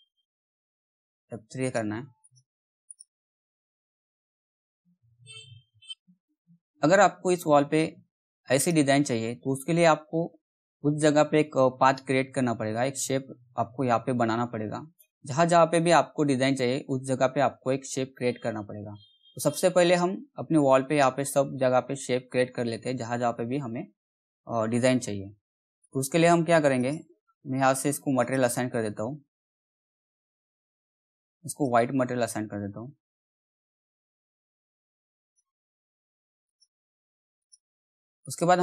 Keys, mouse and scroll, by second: 0.8 F3, 1.6 click, 4.1 middle click, 4.6-5.3 scroll up 1, 5.3 z, 5.9 click, 8.6 click, 19.3 click, 25.8 click, 31.3 click, 34.2 click.